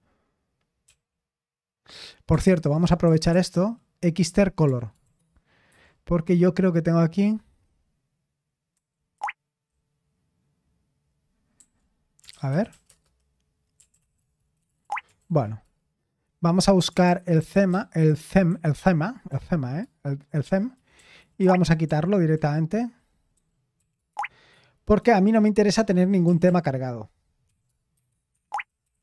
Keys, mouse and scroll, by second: 0.2-0.9 typing, 3.2-5.5 typing, 8.7-9.1 typing, 11.5-15.5 typing, 15.2 ctrl+p, 15.6 Return, 16.8-25.7 typing, 27.4-29.0 typing.